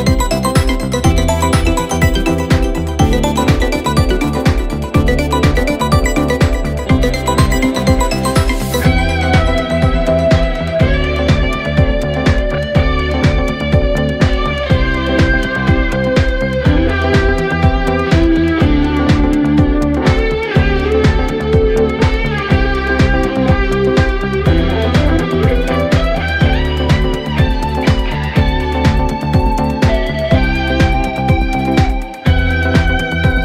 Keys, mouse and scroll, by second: 0.2 click, 0.5 space, 0.9 s, 3.8 click, 4.4 g, 5.5 s, 6.2 space, 8.3-10.0 middle drag, 10.0 space, 10.4 scroll down 1, 10.5-10.8 middle drag, 10.8 shift+a, 11.8-13.4 middle drag, 14.3 click, 15.0 click, 15.2-16.2 right drag, 16.2 click, 17.1-17.6 middle drag, 18.0 KP_3, 18.5 KP_1, 18.9 click, 19.1 shift+a, 20.3 s, 21.0 g, 22.3 click, 22.7 scroll up 6, 23.0 s, 24.8 click, 25.4 g, 26.3 s, 27.1 g, 28.0 g, 29.9 click, 31.6 click, 31.8 click, 32.4-33.0 scroll up 4, 33.0 click, 33.3-33.4 scroll down 3.